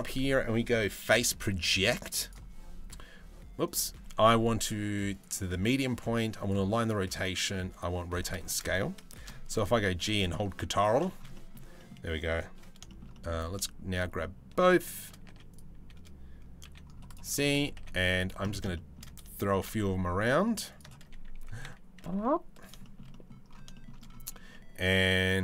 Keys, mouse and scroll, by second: 3.2-7.7 drag, 8.7 shift+middle drag, 9.3 g, 10.9 middle drag, 11.4 middle drag, 12.5-12.9 shift+middle drag, 14.9 z, 16.2 c, 17.4 z, 18.3 shift+middle drag, 19.3 shift+d, 21.0 r, 22.4 middle click, 22.7 middle click, 23.3 middle click, 24.1-25.4 middle drag.